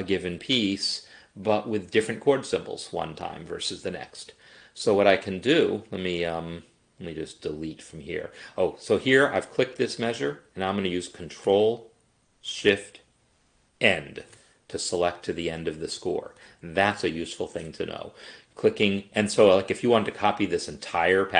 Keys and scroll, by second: 13.8 ctrl+shift+End.